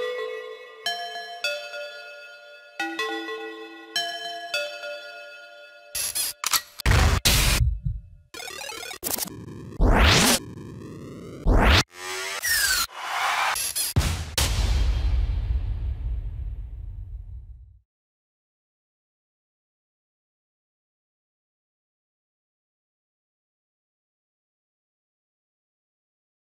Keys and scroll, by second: 23.0 ctrl+s.